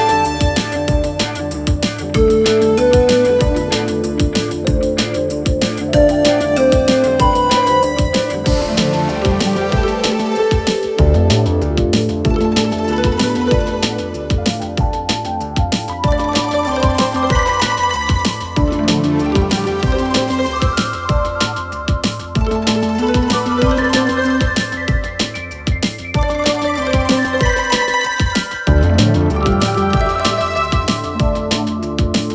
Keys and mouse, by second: 1.4 s, 3.8-4.6 middle drag, 5.0 g, 6.9-8.0 middle drag, 8.3 shift+middle click, 9.9-10.9 middle drag, 11.3 shift+middle click, 12.4 s, 15.4-15.8 middle drag, 16.2 ctrl+a, 17.0 shift+middle drag, 17.5-19.3 middle drag, 19.6 shift+middle click, 19.9-20.8 middle drag, 24.9 shift+middle drag, 26.4-27.7 drag, 31.4 click.